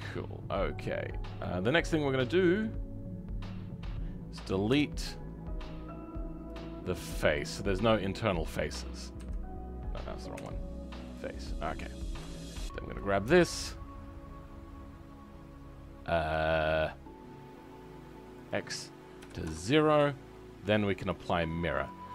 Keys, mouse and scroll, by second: 1.0-1.4 scroll up 2, 1.4-3.4 middle drag, 3.4 click, 6.5 Delete, 6.8-8.2 middle drag, 8.2 click, 12.3-13.6 middle drag, 13.6 click, 19.4-22.1 drag.